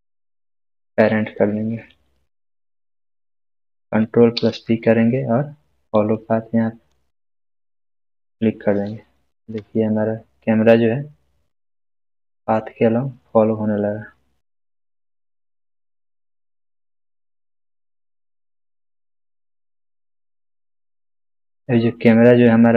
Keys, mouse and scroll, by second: 4.0 shift+click, 4.3 ctrl+p, 8.0 click, 9.3 space.